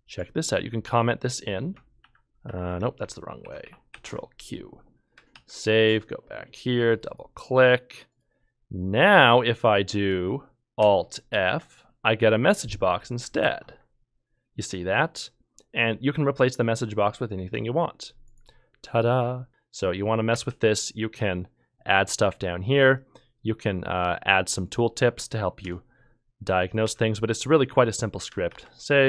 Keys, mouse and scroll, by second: 2.0 ctrl+k, 2.4 Escape, 2.5 ctrl+k, 3.6 ctrl+q, 3.9 ctrl+q, 5.3 ctrl+s, 5.8 ctrl+F2, 11.3 f, 13.4 e, 19.5 shift+k, 20.5 ctrl+k, 25.6 ;, 26.8 ;, 28.5 ctrl+s.